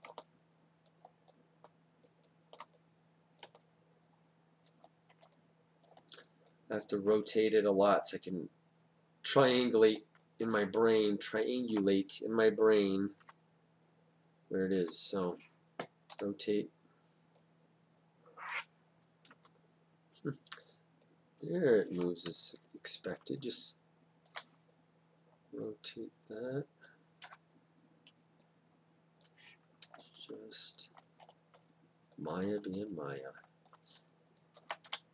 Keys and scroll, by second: 13.2 Down, 14.7 Up, 16.1 e, 19.3 Down, 27.2 Down, 34.8 w.